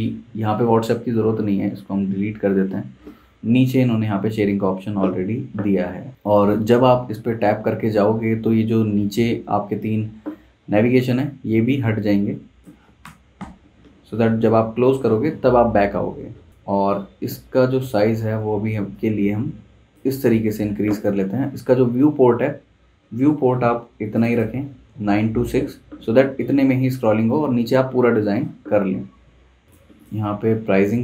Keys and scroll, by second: 2.5 BackSpace, 13.1 BackSpace.